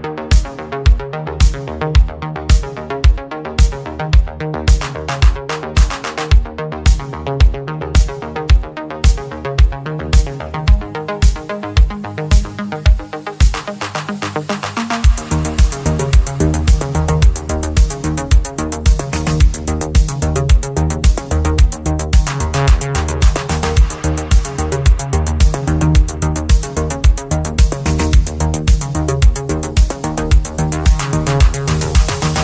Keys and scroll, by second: 12.4 ctrl+z, 13.5 ctrl+z, 15.9 ctrl+z, 17.2 ctrl+z, 30.4 ctrl+z, 31.8 ctrl+z.